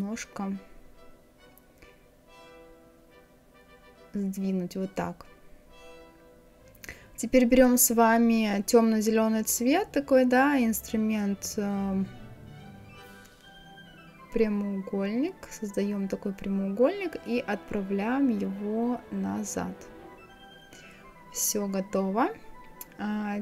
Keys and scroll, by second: 3.2 Right.